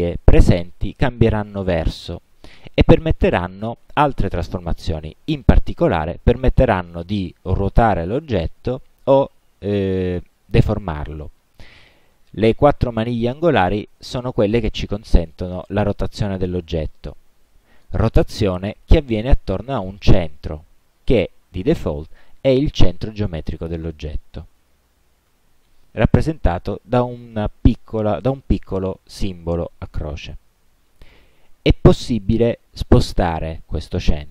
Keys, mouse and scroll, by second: 15.2-23.2 drag, 25.4 ctrl+z.